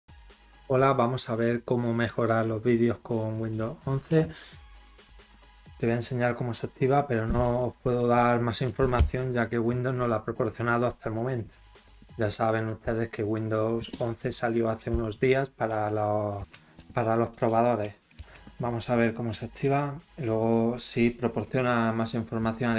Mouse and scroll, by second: 19.5 right click, 20.4 click.